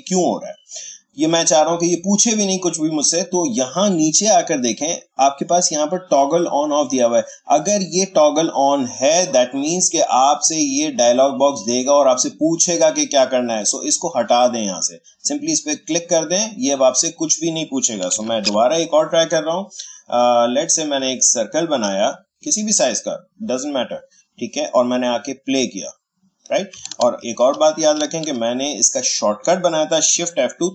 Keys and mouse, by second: 14.2 click, 18.1 ctrl+a, 18.4 Delete, 20.8-24.8 drag, 25.3 click, 27.0 ctrl+z.